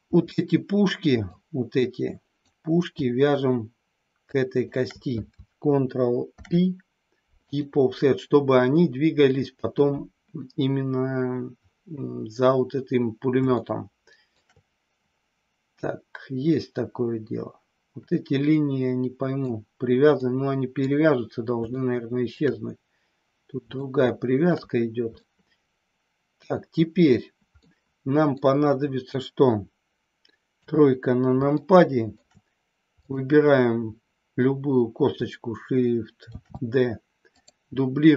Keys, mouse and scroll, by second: 1.4-2.5 drag, 4.1 shift+click, 6.2 ctrl+p, 13.6 shift+middle click, 16.5-17.8 middle drag, 17.9-19.5 middle drag, 20.1 middle click, 21.6 shift+middle click, 23.8 shift+middle click, 25.2-27.1 middle drag, 27.5 middle click, 30.5 KP_3, 31.5 shift+middle click, 36.2 shift+d, 37.2 click.